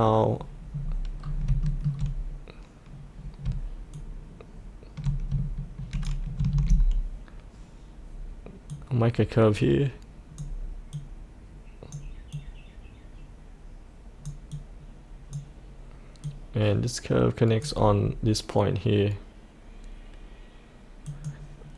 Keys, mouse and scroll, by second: 0.7-1.1 scroll down 1, 1.1-1.5 scroll up 1, 1.6 shift+middle click, 3.9-6.3 shift+drag, 8.7-17.6 drag, 17.9-21.0 scroll down 1, 21.0 click.